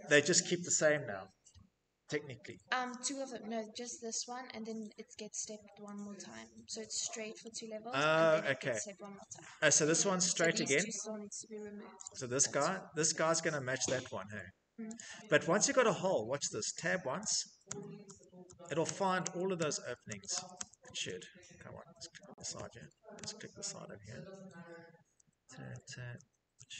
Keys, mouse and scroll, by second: 2.3 right click, 4.6 Escape, 8.7 scroll, 9.5 click, 11.1 click, 14.1 click, 14.4-14.8 scroll, 16.3 Tab, 16.8 Tab, 17.2 Tab, 17.6 Tab.